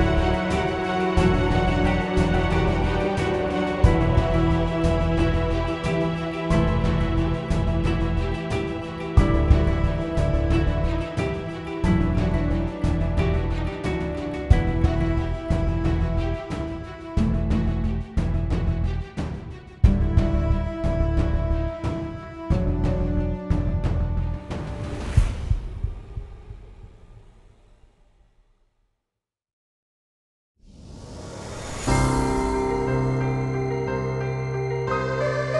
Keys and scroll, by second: 1.8-3.5 typing, 3.7 Return, 5.4-13.4 typing, 32.2-33.9 typing.